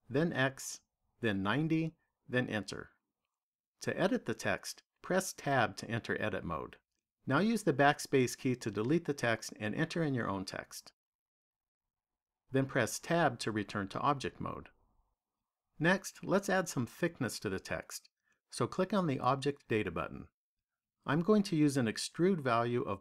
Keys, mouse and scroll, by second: 5.3 Tab, 7.5-10.3 typing, 14.2 Tab, 19.5 click, 22.3 click.